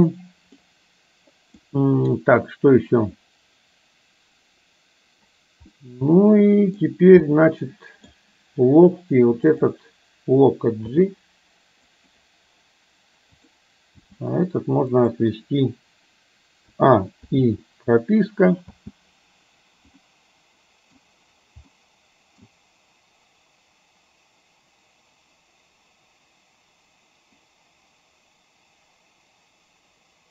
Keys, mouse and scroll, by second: 0.7-1.8 middle drag, 5.8-6.9 middle drag, 7.3 scroll up 1, 7.6 middle click, 10.9 g, 13.4 drag, 14.1 g, 16.8 a, 17.3 i, 18.8 space, 20.2-21.1 middle drag, 21.8-22.6 middle drag.